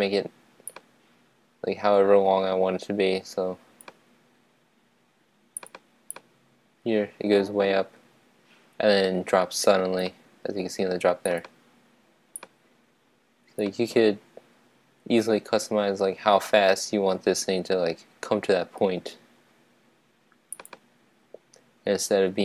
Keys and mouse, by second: 0.8-2.2 drag, 6.3-8.0 right drag, 12.6-14.3 drag.